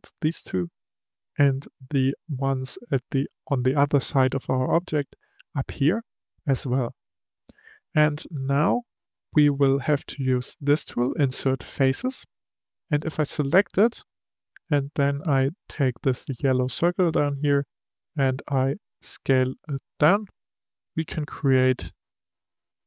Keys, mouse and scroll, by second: 0.7-3.7 middle drag, 8.1-11.3 middle drag, 12.0-13.1 drag, 13.1-16.3 middle drag, 17.3 click.